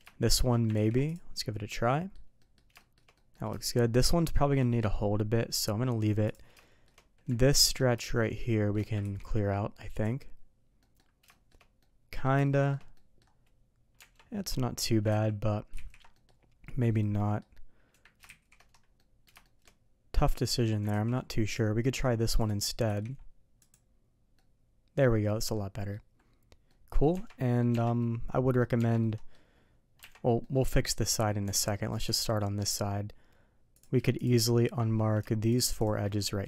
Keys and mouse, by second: 0.3 shift+click, 0.7 ctrl+e, 1.9 middle click, 2.4 middle click, 2.8 shift+middle click, 3.1 middle click, 3.6 shift+middle click, 4.2 middle click, 5.4 middle click, 6.6 shift+middle click, 8.0 shift+middle click, 8.2 shift+click, 8.4 shift+middle click, 9.0 ctrl+e, 10.8 middle drag, 11.3 middle click, 11.4 shift+right click, 11.8 middle click, 12.4 shift+middle drag, 12.9 middle drag, 15.1 ctrl+z, 15.7 ctrl+z, 16.1 middle click, 17.1 click, 18.9 ctrl+shift+middle click, 19.4 ctrl+shift+middle drag, 20.9 ctrl+shift+z, 22.8 ctrl+e, 24.3 middle click, 25.5 middle click, 26.7 middle click, 27.1 Tab, 27.4 middle drag, 27.7 Tab, 28.0 middle click, 29.0-29.3 middle drag, 30.0 Tab, 30.4 middle click, 30.9 middle click, 31.4 Tab, 31.7 middle click, 32.4 middle click, 33.7 click, 34.1 click, 34.4 middle click.